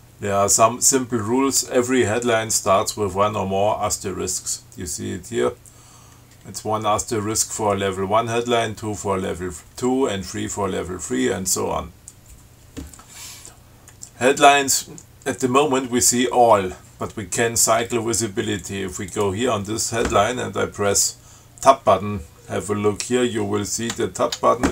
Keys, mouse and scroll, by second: 18.8 click, 19.3 click, 24.1 Tab.